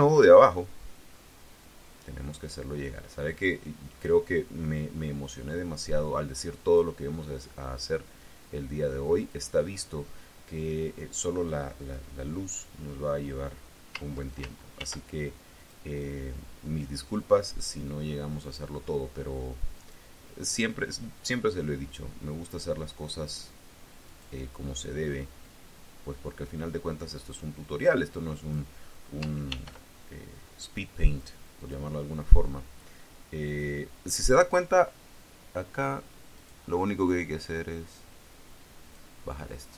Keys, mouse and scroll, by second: 0.0 click, 1.5-4.1 drag, 5.1-6.8 drag, 8.0-9.4 drag, 14.6 ctrl+r, 15.4 click, 18.3 click, 19.6 click, 21.2-22.6 drag, 23.9 click, 25.3-28.6 drag, 29.4 ctrl+r, 30.9 click, 31.4 click, 36.2 click, 37.3-39.0 drag, 39.6-39.7 drag.